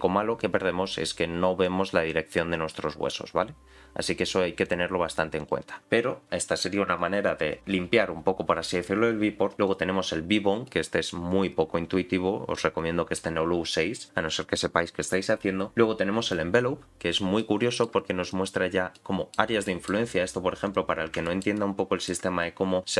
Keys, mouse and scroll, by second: 1.6 click, 4.2 click, 5.4 click, 8.7-9.7 drag, 10.6-13.2 middle drag, 15.0-16.3 drag, 17.4 middle click, 18.2 click, 18.9 middle click, 19.6 shift+middle click, 20.6 click, 21.2 shift+middle click, 21.5 middle click, 22.4 scroll up 1.